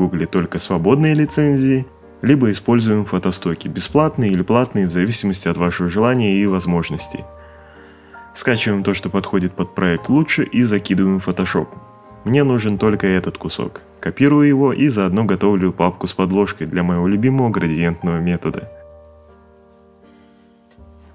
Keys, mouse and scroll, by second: 10.1 click, 11.8 click, 14.3 ctrl+c, 15.2 click, 15.3-16.1 typing, 15.8 click, 17.6 click, 18.4 click, 20.3 right click, 20.5 click, 20.9 click.